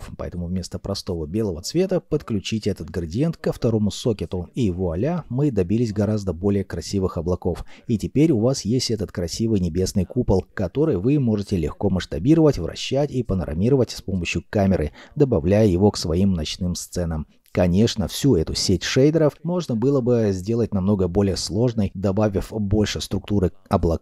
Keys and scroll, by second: 16.2 0.